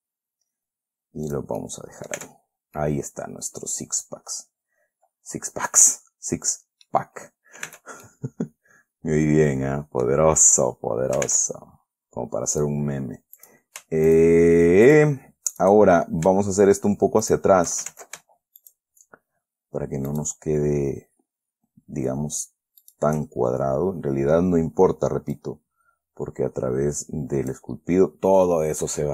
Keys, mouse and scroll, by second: 1.6 click, 1.9 middle click, 2.5 Tab, 2.8-3.1 scroll down 3, 3.1-7.4 middle drag, 7.5 scroll up 2, 8.0 Tab, 8.4-10.6 middle drag, 11.6 ctrl+Tab, 12.9 click, 13.7 click, 14.4 shift+click, 15.2 shift+click, 15.9 shift+click, 16.3-17.6 shift+scroll up 2, 17.6 shift+right click, 18.2 ctrl+shift+z, 18.9 shift+right click, 20.4 shift+right click, 23.2 shift+right click, 23.7-24.2 shift+scroll down 3, 25.7-28.0 drag, 28.0-28.7 scroll down 2, 28.7-29.1 middle drag.